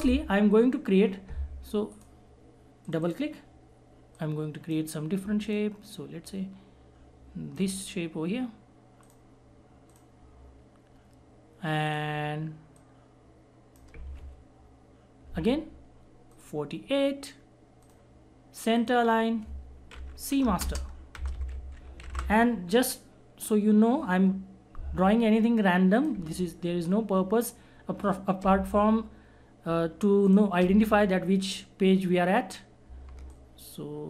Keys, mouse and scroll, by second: 1.9 click, 1.9-16.3 drag, 20.5-22.6 typing, 26.0 click, 26.0 click, 30.0 click, 30.2 shift+click, 33.3 alt+shift+click.